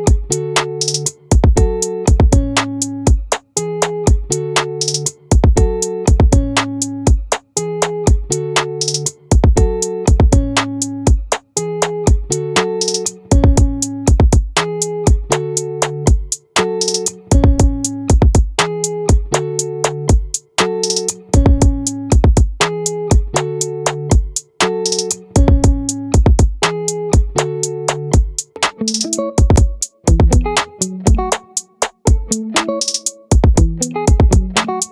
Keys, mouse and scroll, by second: 5.0-6.2 drag, 6.2 right click, 6.8-8.0 middle drag, 11.0-13.2 drag, 13.2 middle click, 14.2-26.7 right drag, 27.4-33.7 right drag.